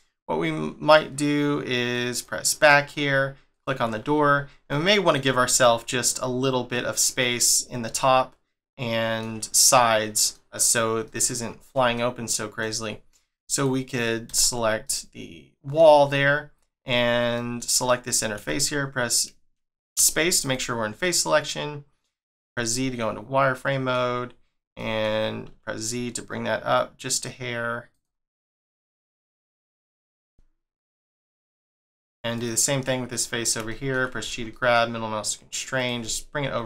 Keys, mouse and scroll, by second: 2.1 click, 2.9-3.5 scroll up 1, 3.5 click, 3.9 scroll up 2, 4.7 shift+middle click, 5.5 click, 6.0 middle click, 7.6 scroll up 1, 8.0 shift+middle click, 10.5 scroll up 1, 11.0 alt+middle click, 11.6 scroll up 1, 11.9 shift+middle click, 12.8 scroll down 2, 13.5 click, 14.3 Tab, 14.8 middle click, 17.3 middle click, 17.7 click, 18.3 z, 18.6 middle click, 19.9 space, 20.4 click, 21.0 middle click, 22.4 z, 22.7 middle click, 28.8 scroll up 1, 29.5 shift+middle click, 30.0 g, 31.7 middle click, 32.3 click, 32.8-33.1 scroll down 1, 33.1 middle click, 34.2 g, 36.0 middle click.